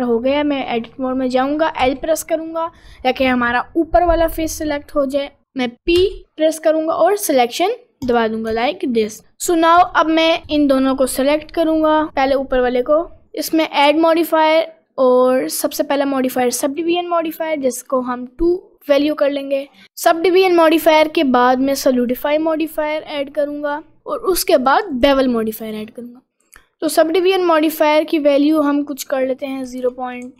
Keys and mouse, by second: 0.3 middle click, 0.8 middle click, 1.5 middle click, 1.8 l, 2.4 middle click, 6.0 p, 8.6 Tab, 9.1 middle click, 12.8-16.9 drag, 18.5 click, 19.8-22.2 drag, 24.0-25.0 drag, 25.8 middle click, 27.0-28.5 drag, 29.4-30.3 drag.